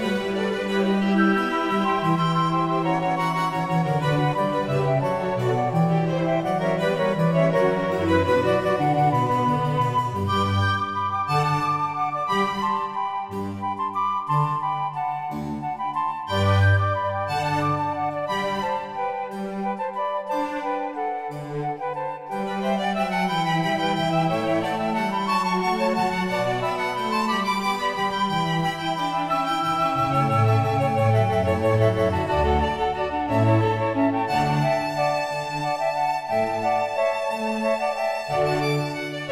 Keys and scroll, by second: 5.5 Return, 8.6 k, 22.3 k, 35.4 g.